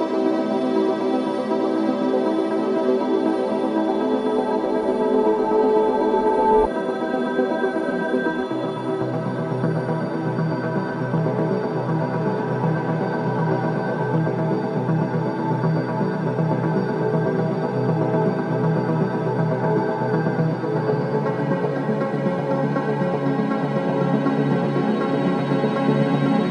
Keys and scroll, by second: 1.5 4, 5.3 3, 5.8 ], 11.1 ctrl+z, 23.3 ctrl+z, 25.0 ctrl+z.